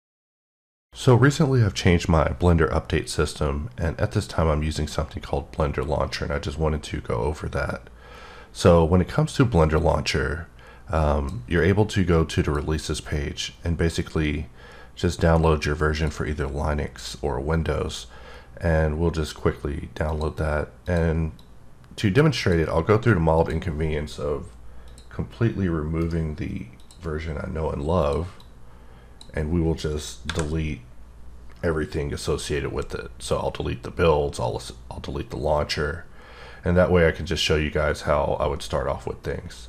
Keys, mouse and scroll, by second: 12.4 click, 15.9 click, 20.1 click, 20.8 click, 21.4 click, 23.3 click, 24.8 click, 26.0 right click, 26.8 click, 28.0 click, 28.4 click, 30.2 Delete.